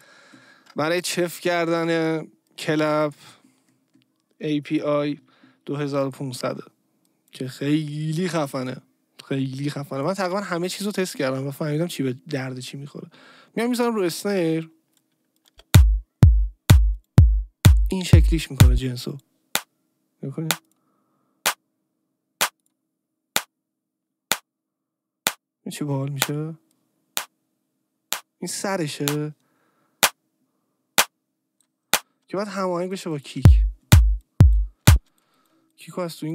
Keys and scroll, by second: 15.5 space, 32.4 space, 34.9 space.